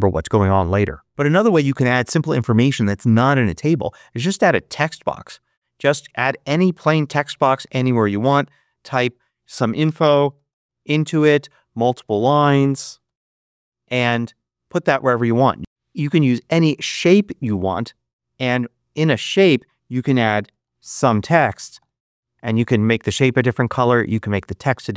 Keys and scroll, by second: 9.2-11.0 typing, 11.0 Return, 12.5-13.8 typing, 15.6 BackSpace, 20.1-22.1 typing.